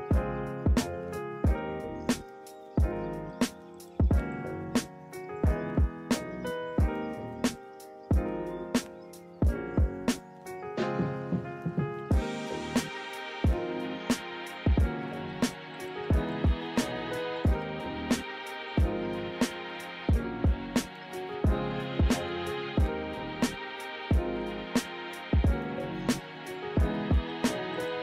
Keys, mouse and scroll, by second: 3.5 ctrl+=, 3.7 right click, 5.0 right click, 8.9 ctrl+z, 9.5 ctrl+z, 11.3 ctrl+-, 11.7 ctrl+=, 12.7 ctrl+-.